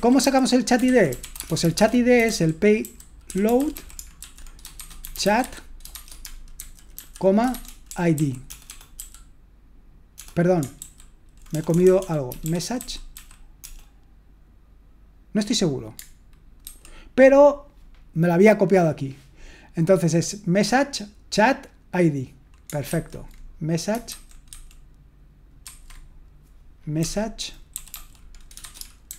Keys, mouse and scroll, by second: 0.0-8.5 typing, 11.2-13.6 typing, 16.7 super+3, 22.9 super+1, 24.1 super+2, 24.5 super+3, 25.6 super+1, 27.7-29.1 typing.